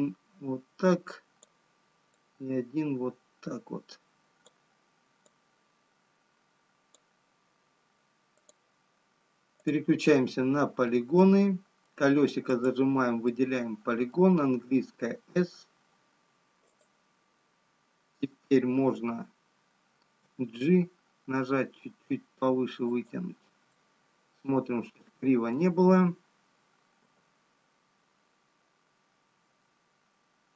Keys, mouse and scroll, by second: 9.6 click, 11.7 middle click, 14.1 click, 14.1 middle click, 16.2 s, 20.3 g, 24.3 middle click, 29.7 g.